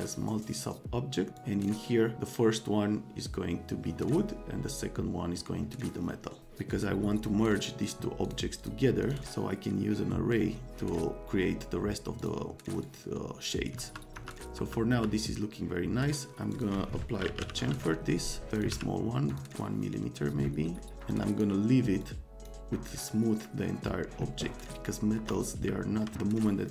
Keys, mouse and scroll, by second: 1.3 click, 7.8 click, 8.2 click, 8.6 click, 9.0 click, 12.1 click, 12.8 click, 13.7 F3, 14.1 F3, 14.5 F3, 14.9 F3, 16.5 click, 17.0-18.7 typing, 18.5 click, 18.6 click, 19.3 click, 20.8 right click, 21.1 click, 22.0 click, 24.9 middle click, 25.1 F3, 25.6 click, 26.6 click.